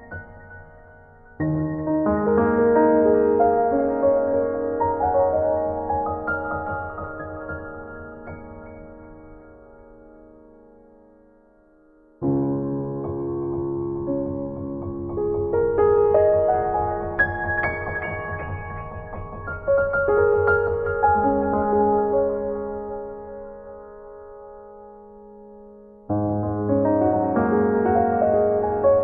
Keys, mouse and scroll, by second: 24.8 click, 26.3 click, 27.4 click, 27.9 click, 28.6 middle click.